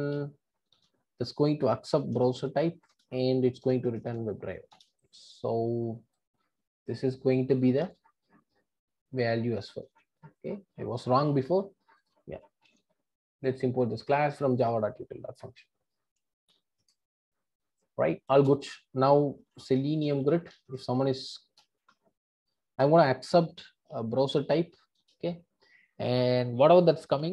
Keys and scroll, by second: 2.9 Return, 7.8 super+x, 9.8 super+v, 12.6 alt+Return, 25.0 Return.